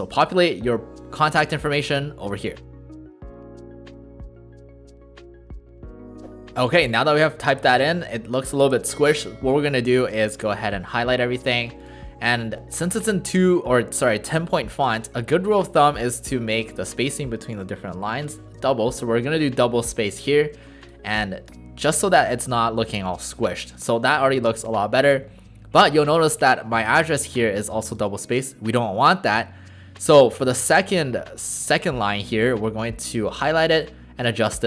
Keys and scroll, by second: 2.6-6.6 typing, 10.4 ctrl+a, 18.9 Return, 18.9 typing.